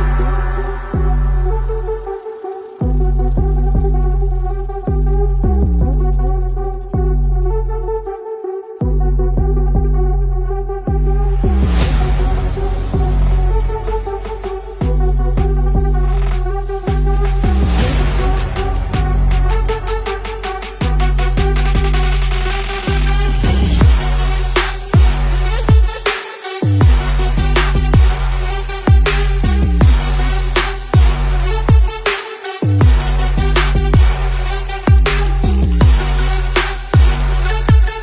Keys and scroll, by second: 0.6 space, 0.7 space, 18.0 ctrl+d, 18.3 z, 18.5 space, 18.7 space, 18.8 v, 21.0 z, 21.1 space, 21.4 space, 21.6 v, 23.9 ctrl+shift+z, 24.1-26.4 typing, 27.5-31.1 typing, 34.2 ctrl+shift+Caps_Lock, 34.4 ctrl+z, 34.4 v.